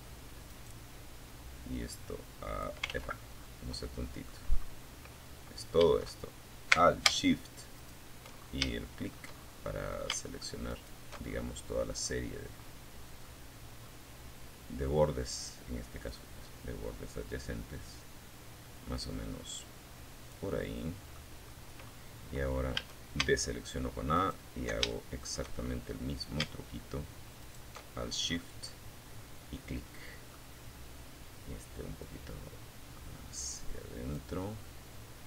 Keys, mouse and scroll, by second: 1.2 ctrl+z, 1.6 scroll up 2, 2.0 middle click, 2.6-3.0 scroll up 2, 5.9 alt+shift+click, 6.6 scroll up 2, 7.0 shift+middle click, 7.7 shift+scroll up 1, 8.9 alt+shift+middle click, 9.4-10.2 alt+shift+scroll down 2, 10.4-11.6 drag, 12.0-13.1 drag, 14.3-18.7 drag, 18.7 click, 19.7-20.3 scroll up 4, 20.9 a, 22.3 alt+shift+middle click, 23.1 alt+shift+middle click, 23.7-24.3 shift+scroll up 1, 25.6 alt+shift+middle click, 26.1-26.7 alt+shift+scroll down 3, 26.9-28.7 middle drag, 30.2-32.5 drag, 32.9-34.3 middle drag, 34.5 scroll down 1, 35.1 middle click.